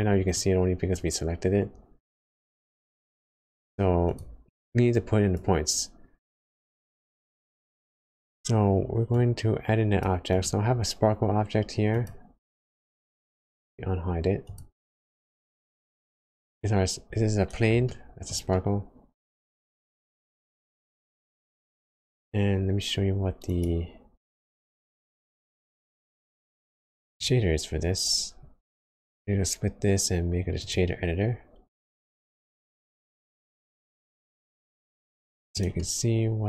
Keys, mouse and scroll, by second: 6.3 click, 10.2 click, 15.3 middle click, 16.6 scroll up 2, 17.4 scroll up 1, 17.9 shift+middle click, 18.5 middle click, 19.9 click, 20.6 click, 23.4 right click, 33.5 scroll down 2, 34.0 middle click, 35.7 middle click.